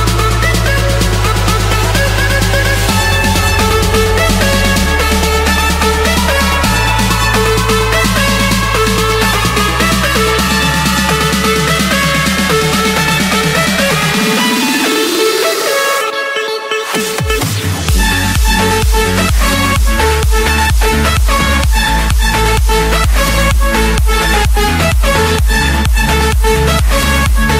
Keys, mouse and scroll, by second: 0.7 click, 3.3 click, 3.6-6.0 scroll down 15, 6.2 scroll, 7.6 click, 7.9 scroll, 8.0-8.4 scroll down 3, 8.4-9.0 scroll up 7, 10.5 Escape.